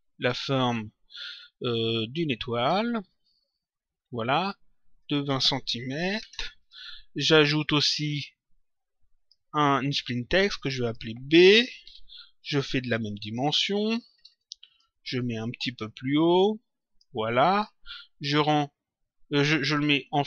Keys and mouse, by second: 2.5 click, 4.9 click, 6.5 click, 7.7 click, 10.5 click, 11.8 shift+b, 12.9 click, 14.6 click, 15.8 click, 19.3 click.